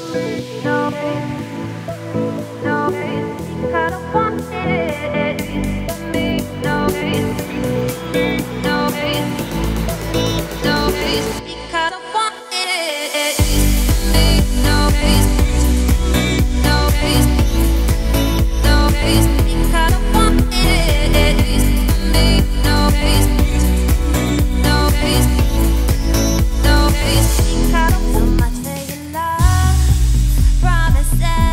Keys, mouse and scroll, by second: 0.1 g, 5.4 scroll up 2, 5.9 f, 6.9 scroll up 2, 7.0 g, 8.5-9.1 scroll down 10, 9.1 middle click, 9.3 scroll up 1, 9.4 a, 10.6 middle click, 10.9-11.3 scroll up 2, 11.3 shift+middle click, 11.6-12.3 scroll up 2, 12.3-13.4 scroll up 1, 13.4 e, 15.4 z, 15.8 `, 16.3 z, 16.8 click, 17.8 g, 18.8 z, 19.0 scroll down 3, 19.1 middle click, 19.5 scroll up 2, 19.6 a, 19.9-20.9 middle drag, 20.9 shift+n, 21.3 click, 21.4 3, 21.8 click, 22.1 g, 24.6 shift+d, 26.1 p, 27.1 click, 29.3 middle click, 29.6 Tab, 30.6 click, 31.1 click.